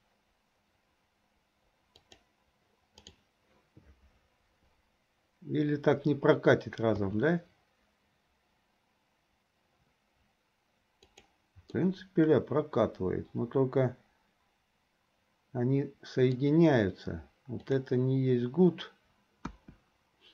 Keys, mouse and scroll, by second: 7.0 s, 11.9-16.4 middle drag, 11.9 scroll up 1, 17.9 click, 19.5 KP_1.